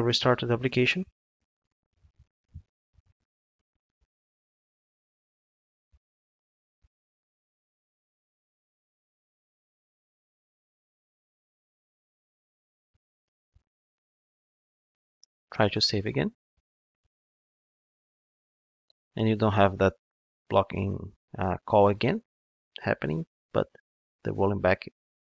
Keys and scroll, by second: 1.0 ctrl+d.